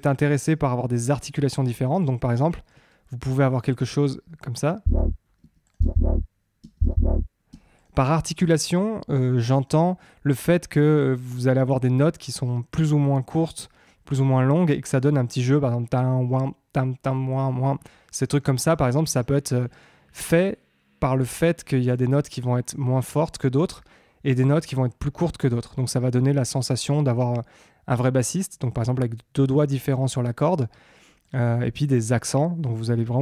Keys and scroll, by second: 4.8 space.